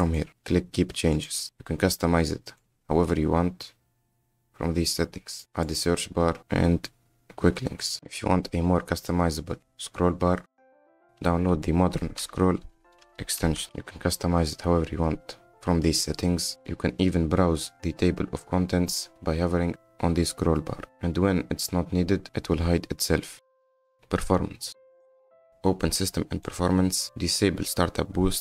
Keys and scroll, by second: 5.2 m, 9.9 s.